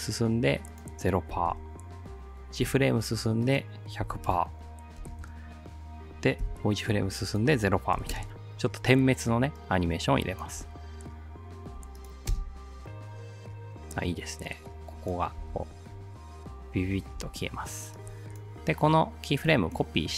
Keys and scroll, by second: 1.3 0, 1.5 Return, 2.6 ctrl+Right, 3.8-5.0 typing, 5.3 Return, 6.4 ctrl+Right, 8.0 0, 8.2 Return, 12.3 alt+space, 15.4 space, 17.2 space.